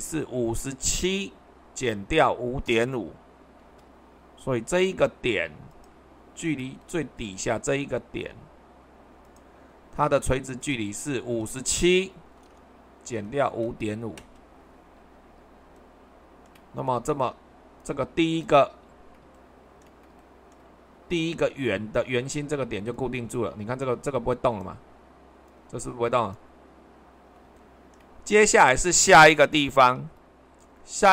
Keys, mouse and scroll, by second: 0.0-0.9 scroll up 1, 0.9 scroll up 1, 3.6 super+2, 6.4-8.4 shift+middle drag, 11.9 typing, 13.5-13.9 typing, 14.1 Return, 29.9 super+1.